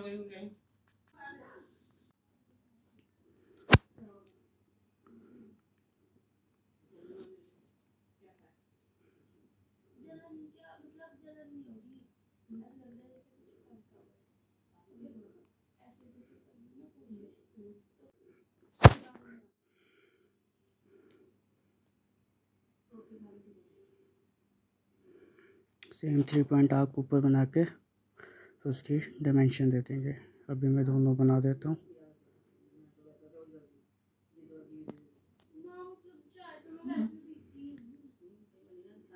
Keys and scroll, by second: 3.6-4.5 typing, 37.1 Escape.